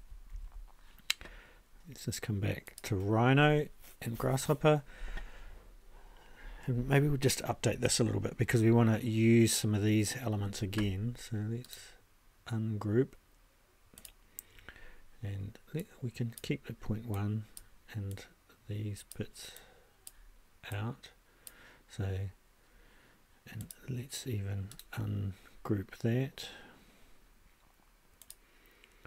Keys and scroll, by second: 0.3 ctrl+a.